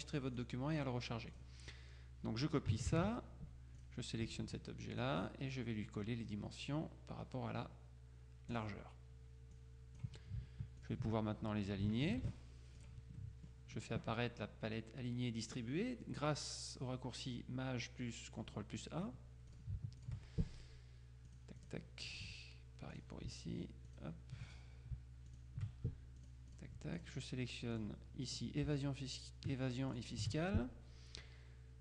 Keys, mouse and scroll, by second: 0.4 click, 1.4 click, 3.0 ctrl+c, 3.9 click, 5.1 click, 8.6 click, 9.6-10.5 drag, 10.9 shift+click, 12.1 ctrl+shift+a, 12.9 click, 19.6 shift+click, 21.4 click, 23.1 click, 24.0 shift+click, 25.4 click, 26.3-27.6 drag, 27.9 click, 30.0 shift+click.